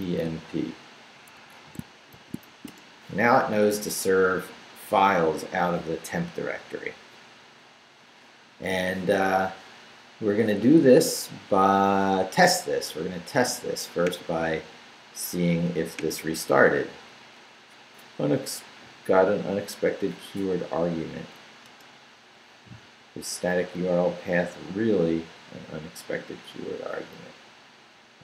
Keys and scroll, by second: 0.0-0.7 typing, 1.8 shift+Escape, 2.1 shift+;, 2.4 shift+w, 2.7 Return, 21.1 Up, 21.6 Return.